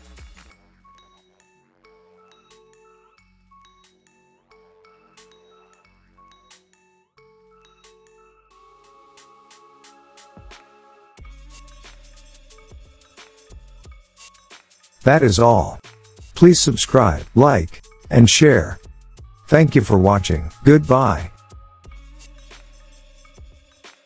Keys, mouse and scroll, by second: 0.4 scroll down 1, 1.8 middle click, 2.2 middle click, 2.3 middle click, 2.5 middle click, 2.6 middle click, 3.0-4.2 scroll, 4.2-6.3 scroll, 6.3 click, 8.9 click, 11.6-13.9 drag, 13.9 click.